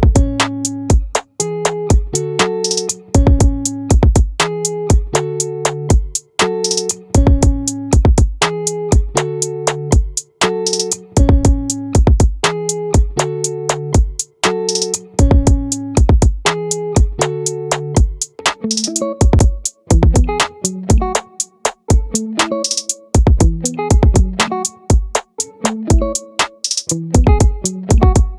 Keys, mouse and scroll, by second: 0.1-4.5 right drag, 9.6-11.2 drag, 11.2-15.8 middle drag, 15.8-17.6 drag, 18.0-25.0 middle drag, 20.2 a, 25.0 Tab, 28.2 click.